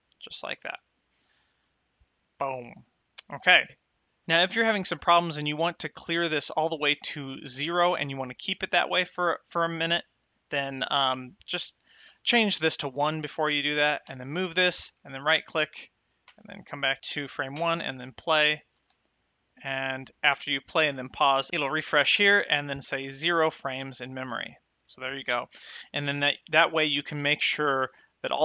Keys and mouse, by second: 4.0 space, 11.6 click, 12.7 KP_1, 14.4 g, 15.3 right click, 16.6 shift+click, 17.8 space, 19.1 space, 25.5 shift+click, 25.6 Left.